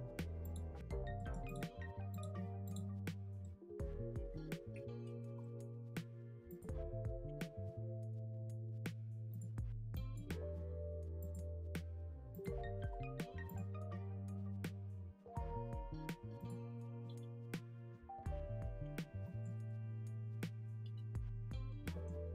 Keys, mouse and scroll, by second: 1.4 click, 2.1 click, 3.4-5.0 middle drag, 5.0 Tab, 5.4 middle click, 5.8 3, 6.3 Tab, 6.4 click, 6.8 Tab, 7.2 Tab, 9.2-11.3 drag, 11.5 Tab, 12.3 click, 14.2 scroll down 2, 14.3 middle click, 15.2 z, 15.6-16.3 scroll up 2, 16.3 click, 16.9 scroll down 1, 17.0 middle click, 17.9 g.